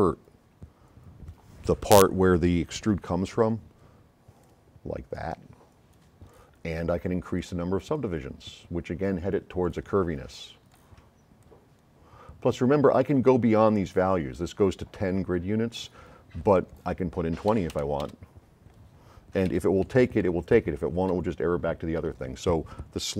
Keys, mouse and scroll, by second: 0.5 ,, 4.5-5.0 drag, 7.4-9.4 drag, 9.8 click, 10.8 click, 11.4 click, 17.7 KP_2, 17.9 KP_0, 18.1 KP_Enter, 19.5 a, 20.2 s, 20.2-22.2 right drag.